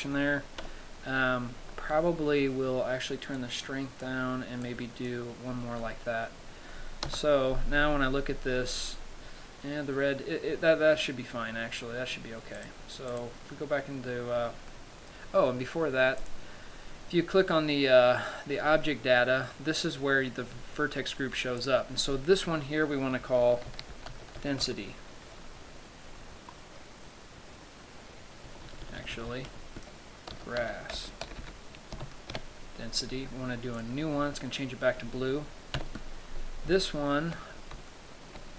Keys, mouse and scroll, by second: 0.8 KP_7, 2.0-2.6 scroll down 4, 3.6 click, 4.8 click, 6.1 middle click, 7.3 KP_0, 8.6-9.3 scroll down 2, 12.8 click, 13.3 click, 14.9 middle click, 16.5 click, 21.8 click, 34.0 click, 36.1 KP_7, 37.1 shift+middle click, 38.1-38.5 scroll up 2.